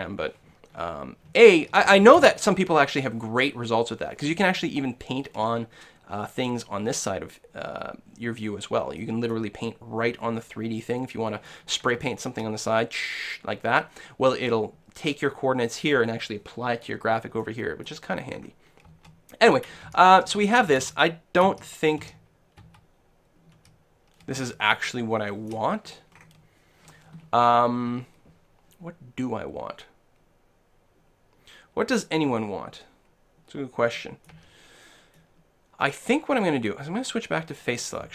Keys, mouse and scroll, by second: 0.7 middle click, 1.6 KP_1, 1.8 KP_3, 2.2 KP_1, 9.0 click, 9.2-10.9 middle drag, 11.5-13.8 middle drag, 17.4-19.0 middle drag, 19.8 middle click, 19.9-22.6 typing, 23.7 KP_1, 24.9 shift+middle click, 33.9-37.0 middle drag, 34.3 a, 37.5 click, 38.0 right click.